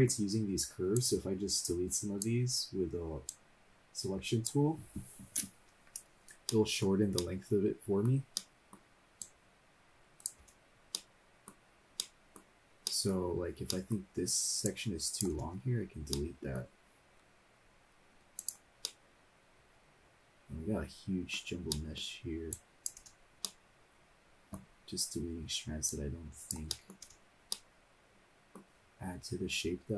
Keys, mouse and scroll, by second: 0.9 click, 1.8 click, 3.2-4.6 drag, 5.6 Delete, 6.5 middle click, 7.1 middle click, 8.3 middle click, 9.2 click, 10.0 click, 10.4 Delete, 10.9 middle click, 11.7 scroll down 1, 12.0 middle click, 12.4-12.8 scroll down 1, 12.8 middle click, 13.2 scroll up 1, 13.7 middle click, 13.9-14.6 scroll up 1, 14.6 click, 15.3 Delete, 16.1 middle click, 17.1 scroll down 1, 18.3 click, 18.8-21.3 middle drag, 21.7 middle click, 22.5 click, 23.0 Delete, 23.4-24.5 middle drag, 24.6-25.1 scroll down 2, 25.3-25.9 scroll up 1, 25.9 click, 26.7 middle click, 27.1 Delete, 27.5-28.5 middle drag, 28.6-29.7 scroll up 3.